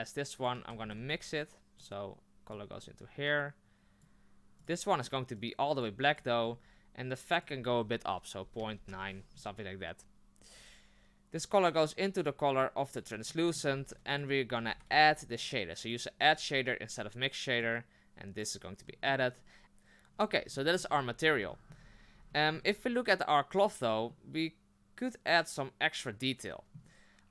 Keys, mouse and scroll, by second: 0.4 click, 0.6 ctrl+c, 0.8 ctrl+v, 4.0 click, 11.4 click, 12.6 click, 15.9 d, 17.6 click, 19.6-20.1 drag, 20.1-20.5 scroll up 3, 20.5-20.9 shift+middle drag, 20.9-21.3 scroll up 3, 21.5-27.3 shift+middle drag, 21.8-22.3 scroll up 2.